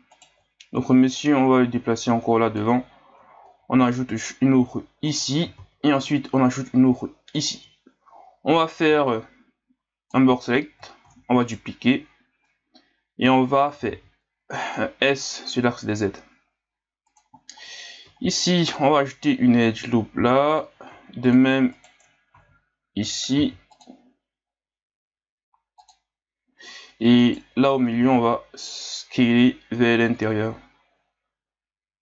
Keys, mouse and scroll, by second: 0.1 alt+right click, 1.1-3.4 drag, 3.4 ctrl+r, 5.5 ctrl+r, 7.8 scroll up 2, 8.6 right click, 8.9 b, 11.0 shift+d, 13.7 s, 18.1 ctrl+r, 20.9 ctrl+r, 22.3 ctrl+z, 23.4 ctrl+r, 27.2 alt+right click, 28.0 s.